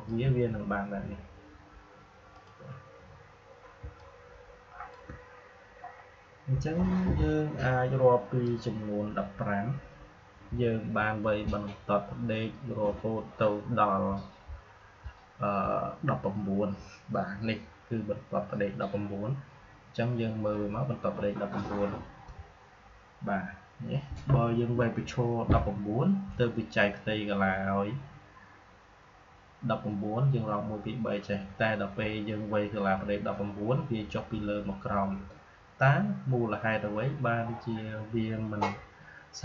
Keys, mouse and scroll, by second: 2.6 click, 3.9-12.4 shift+drag.